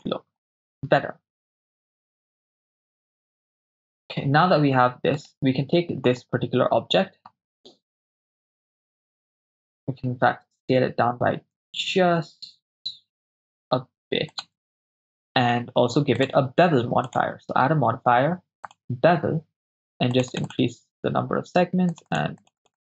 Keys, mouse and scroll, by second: 1.1 click, 2.8 KP_0, 5.4-5.9 right drag, 8.5-10.3 drag, 10.3 s, 14.3-16.2 shift+drag, 17.1-18.8 drag, 20.2 click, 20.5 click, 21.9 click, 22.1 click, 22.4 click, 22.6 click.